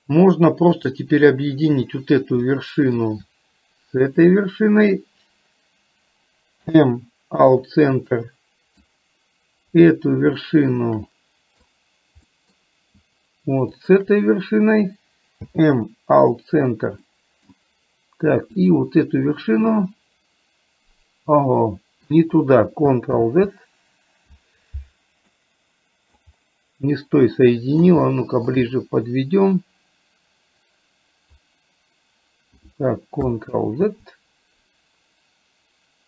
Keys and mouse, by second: 0.9 click, 2.5 middle click, 4.2 shift+click, 6.7 m, 8.1 middle click, 9.9 click, 11.1 middle click, 12.4 middle click, 15.5 m, 17.1 middle click, 20.1-22.2 middle drag, 23.2 ctrl+z, 25.4 middle click, 27.6 middle click, 28.1 shift+middle click, 33.6 ctrl+z.